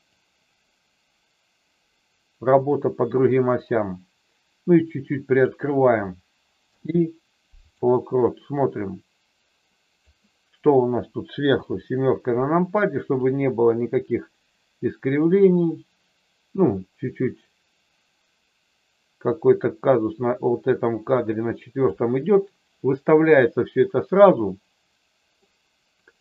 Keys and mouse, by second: 0.1-5.5 drag, 8.6-9.9 drag, 11.6 KP_7, 13.2-21.8 drag, 24.2-25.3 middle drag.